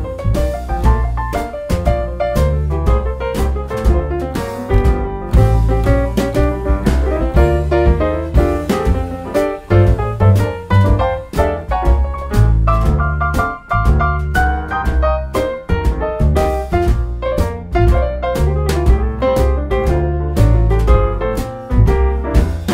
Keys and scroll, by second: 0.9 super+d, 2.7 ctrl+d, 3.5 super+d, 4.0 super+d, 4.4 super+d, 15.8 ctrl+d, 16.4 super+d.